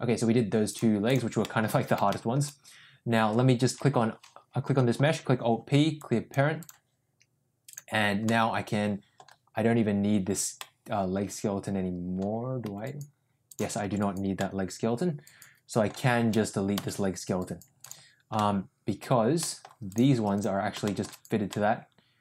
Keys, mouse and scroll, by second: 0.8 click, 1.4 middle click, 2.0 shift+middle click, 4.9 alt+p, 6.6 click, 8.2 middle click, 10.5-11.6 middle drag, 11.8-12.1 middle drag, 12.6 g, 14.1 ctrl+z, 14.3-15.8 middle drag, 16.9 Delete, 18.3-18.9 middle drag, 19.3 middle drag, 20.3 click, 20.8 shift+middle drag, 21.4-22.2 middle drag.